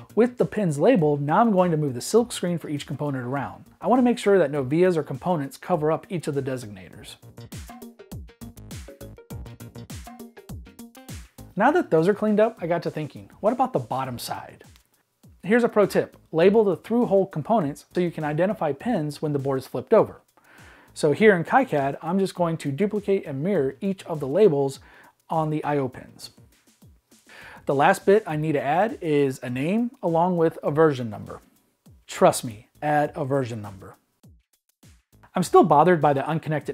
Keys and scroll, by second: 0.0-1.0 typing, 2.9 Escape, 3.2 e, 4.5-6.3 typing, 7.7 m, 8.8 m, 9.0 Escape.